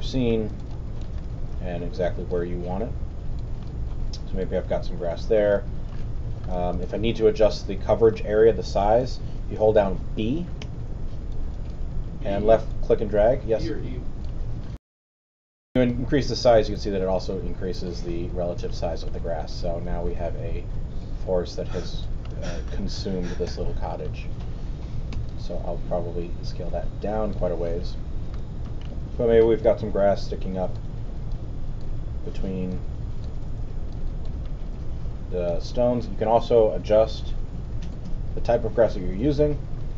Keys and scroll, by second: 10.6 b, 14.7 super+., 23.4 alt+z, 25.1 b.